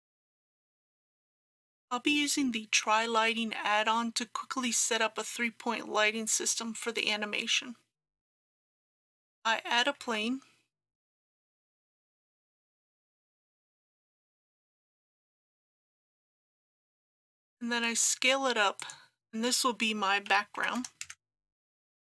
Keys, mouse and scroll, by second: 9.0 click, 10.0 shift+a, 12.3 click, 13.7 g, 14.3 z, 18.8 click, 20.3 s, 20.6 KP_1, 20.8 KP_0.